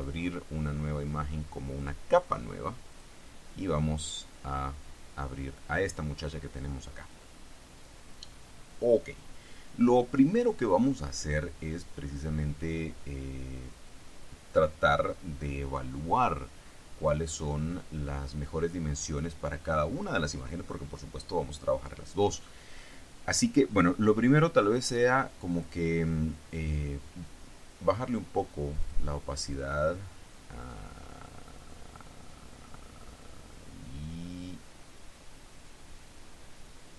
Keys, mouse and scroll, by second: 2.0 click, 3.1 click, 25.1 click, 25.6 click, 29.0 click, 29.7-36.9 drag.